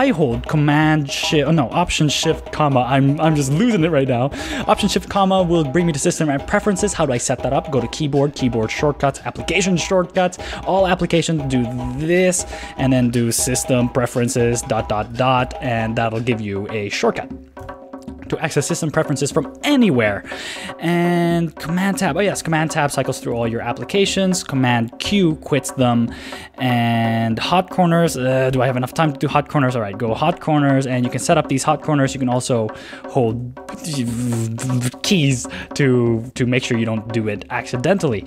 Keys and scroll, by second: 2.1 alt+shift+-, 13.4 shift+s, 15.1 Escape, 17.6 super+w, 22.3 super+Tab, 23.4 shift+super+Tab, 25.0 super+q.